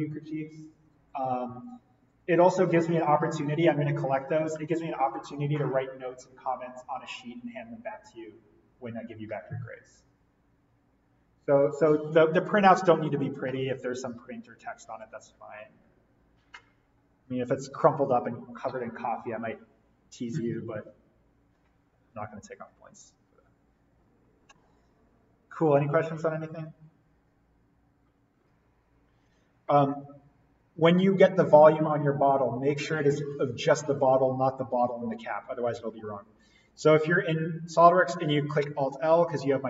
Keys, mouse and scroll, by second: 28.4 click, 35.4 click, 35.8 alt+l, 36.7 click, 38.5 alt+l.